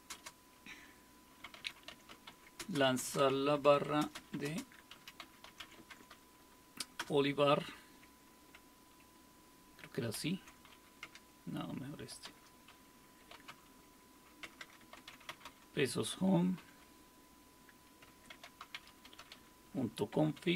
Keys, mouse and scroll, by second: 0.0-0.1 typing, 1.2-7.5 typing, 9.9-16.6 typing, 18.1-20.4 typing.